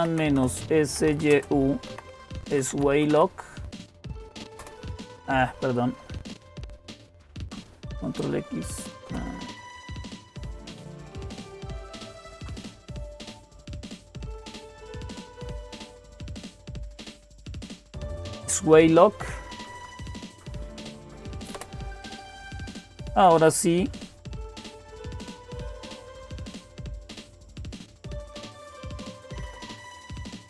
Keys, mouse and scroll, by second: 0.0-3.6 typing, 4.4 Return, 6.9-7.6 typing, 8.6-9.4 typing, 12.1 ctrl+c, 14.9 Up, 15.8 Left, 16.1 Left, 16.3 Left, 16.5 Left, 16.6 Left, 17.0 Left, 17.8 w, 17.9 Delete, 19.3 Right, 19.5 Right, 19.7 Right, 19.9 Right, 20.1 Right, 21.4 Right, 21.4 Return, 22.7-29.0 typing, 29.2 Left, 29.2 Right, 29.2 Return.